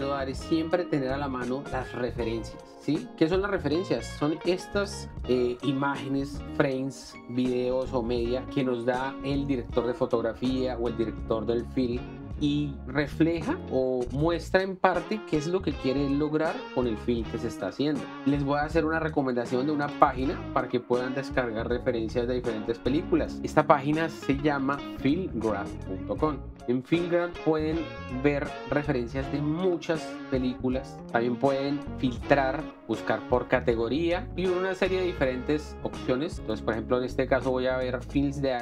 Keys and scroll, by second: 23.4 alt+Tab.